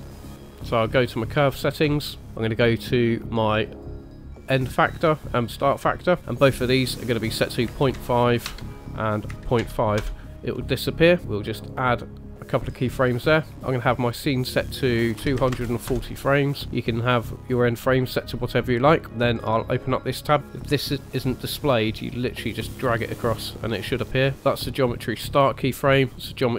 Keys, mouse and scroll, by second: 0.9 click, 2.2 scroll down 3, 4.1 click, 12.4 click, 13.9 click, 19.7 click, 20.4 n, 20.5 click, 22.5 click, 24.4 click, 25.8 click.